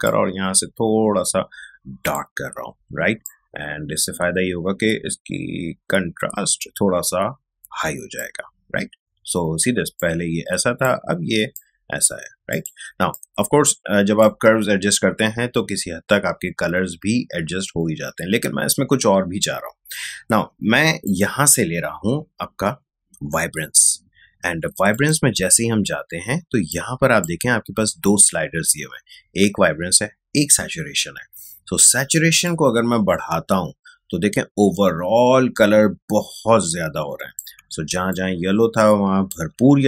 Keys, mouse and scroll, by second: 0.0-20.2 drag, 21.0 click, 24.8 click, 24.9-29.7 drag, 32.4-37.6 drag, 37.6 ctrl+space, 38.0 ctrl+click, 38.2 ctrl+space.